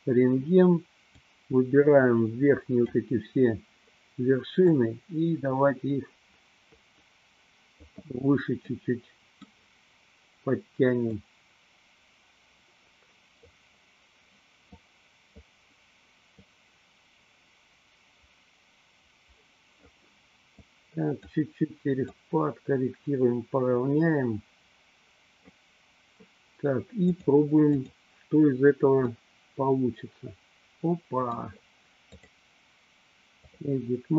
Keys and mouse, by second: 1.3-3.0 drag, 4.8-8.0 drag, 8.7 middle click, 11.2-13.5 drag, 14.9 click, 16.4-19.9 drag, 20.5 click, 22.2-25.5 drag, 27.1 click, 29.2-31.5 middle drag, 32.3-33.6 drag.